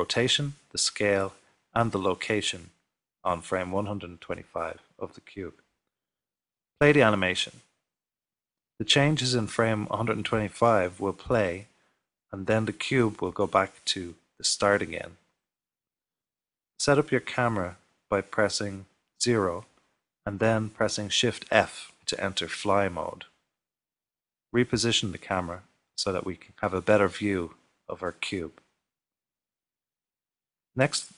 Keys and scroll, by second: 19.7 typing, 27.4 shift+f.